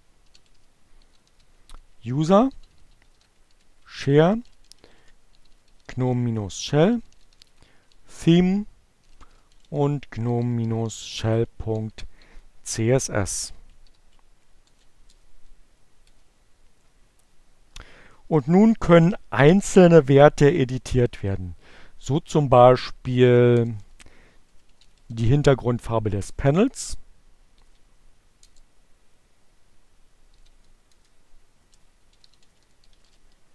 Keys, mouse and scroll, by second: 0.0-11.5 typing, 13.1 shift+9, 13.3 shift+Return, 14.8 Return, 21.2 BackSpace, 23.5 a, 24.1 n, 25.7 Return, 26.0 alt+q, 27.1 BackSpace, 28.6 alt+7, 28.7 alt+Return, 31.0-32.3 typing, 33.4-33.5 typing.